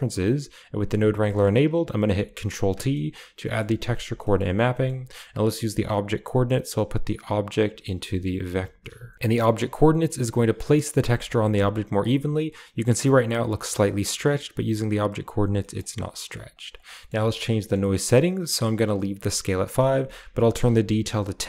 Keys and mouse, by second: 0.8 click, 1.2 middle click, 2.5 ctrl+t, 2.8 middle click, 3.3 middle click, 3.7 a, 4.2 middle click, 4.7 middle click, 6.0 click, 7.0 click, 7.8 middle click, 8.5 drag, 9.3 middle drag, 10.1-10.4 drag, 11.1 shift+middle click, 11.4 middle click, 14.2-14.6 drag, 15.6 middle click, 16.2 click, 16.4 click, 16.8 middle click, 17.5 middle click, 19.8-21.2 drag.